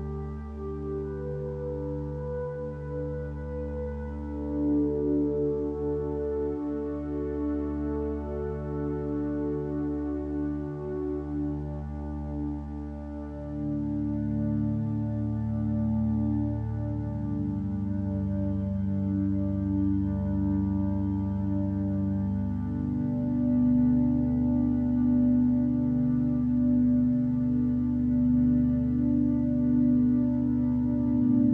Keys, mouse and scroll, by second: 0.8 ctrl+space, 22.2 b.